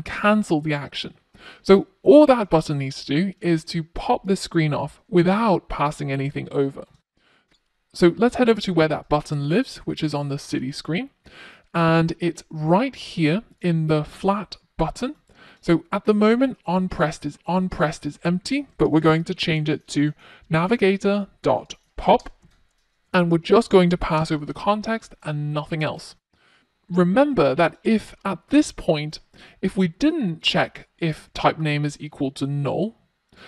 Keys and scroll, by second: 16.9 Return.